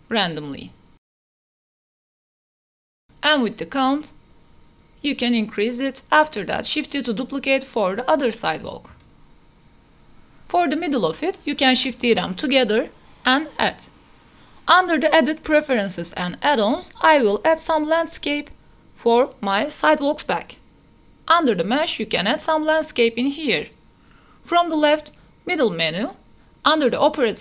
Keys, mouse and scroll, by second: 0.5 click, 1.6 click, 2.1 click, 2.4 click, 2.5 click, 2.7 click, 2.8 KP_0, 2.8 a, 3.2 click, 3.7-4.1 middle drag, 4.5 shift+middle drag, 4.9 shift+d, 5.1 x, 6.1-7.8 typing, 6.7 KP_Enter, 10.1 KP_0, 12.7 middle click, 13.6 click, 14.4-15.7 drag, 21.3 shift+a, 24.8-25.2 middle drag, 25.3 shift+middle drag, 26.3 shift+middle drag.